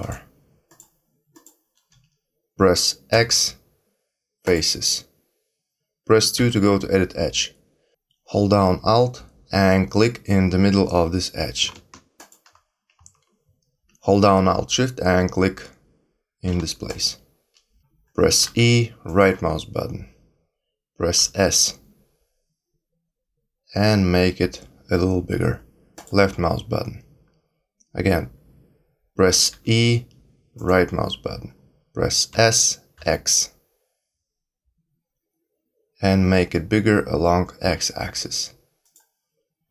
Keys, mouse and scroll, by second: 0.7 shift+click, 1.3 shift+click, 3.1 x, 6.3 2, 12.1 alt+click, 16.8 alt+shift+click, 18.4 e, 21.1 s, 29.5 e, 32.3 s.